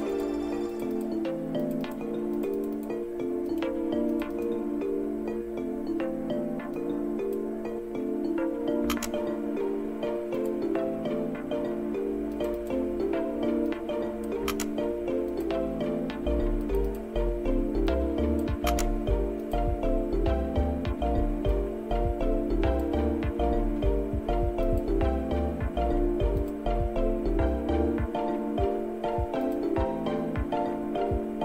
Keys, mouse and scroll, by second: 0.7 click, 1.0 click, 1.7 click, 2.4 click, 2.6 click, 3.5 click, 4.1 click, 4.4 click, 6.8 click, 8.8 1, 10.4 click, 12.3 click, 12.6 click, 13.7 click, 14.4 typing, 15.3 click, 16.6 click, 16.9 click, 16.9 typing, 17.9 click, 18.6 typing, 19.5 click, 21.5-22.9 drag, 24.7 click, 26.4 click, 29.5 click.